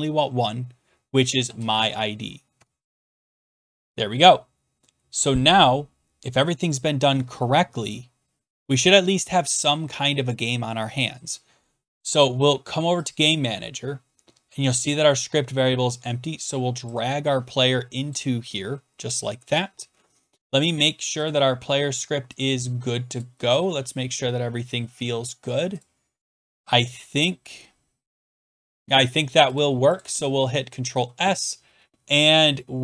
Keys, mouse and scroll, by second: 1.1-2.3 typing, 2.6 Tab, 13.1-17.5 drag, 18.1-21.3 drag, 22.4 click, 23.3 click, 23.6 click, 25.8 click, 26.2-26.6 scroll down 11, 28.2 scroll down 1, 28.3-29.5 scroll up 7, 29.6 click, 30.0 click, 30.1 ctrl+s.